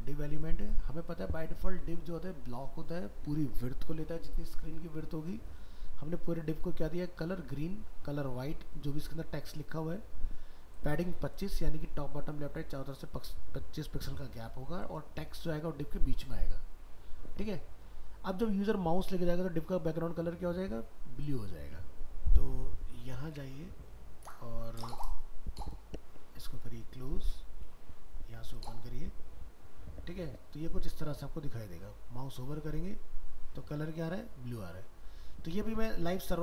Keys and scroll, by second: 23.3 alt+Tab.